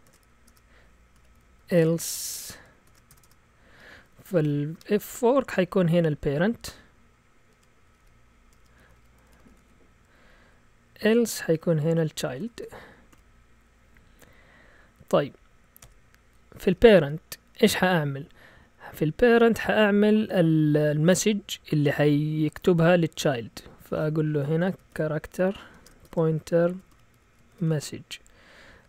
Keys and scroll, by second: 0.1 shift+Tab, 0.5 Return, 0.9-6.0 typing, 7.5-14.8 typing, 15.8 typing, 24.4-28.2 typing.